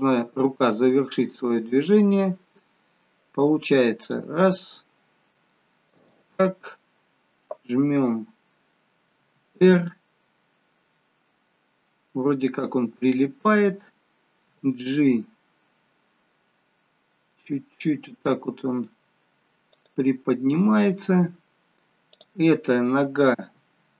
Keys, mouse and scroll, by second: 1.5 click, 3.9 click, 5.8 shift+click, 9.2 r, 14.5 g, 20.7-21.1 scroll down 1, 22.0 click, 22.0-23.4 scroll down 1, 23.4 r.